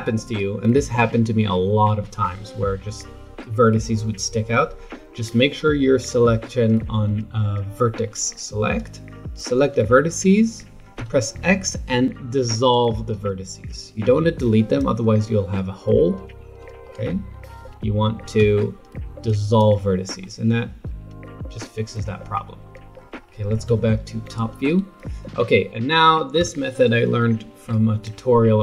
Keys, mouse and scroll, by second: 8.8 click, 10.9 x, 15.2-17.5 middle drag, 17.5 ctrl+z, 18.4 x, 20.2-22.3 middle drag, 22.3 scroll down 4, 22.9 middle click, 23.7 KP_7, 26.4 Tab.